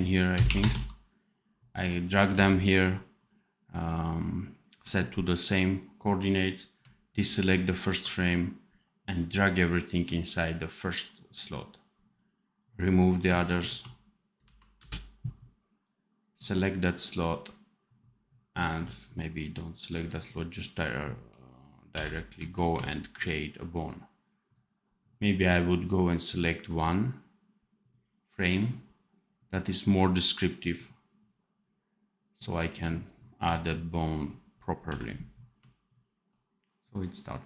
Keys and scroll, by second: 2.2 v, 14.3 Delete, 21.8 n, 34.8 n.